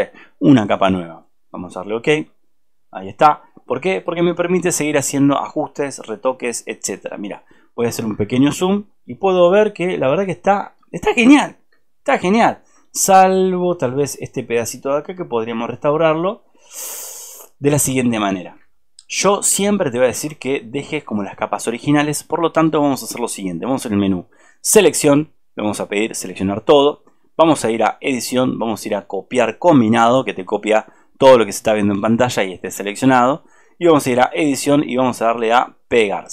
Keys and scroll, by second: 8.4 ctrl+z, 9.6 alt+space, 13.8 alt+space, 18.6 alt+space, 20.6 alt+space.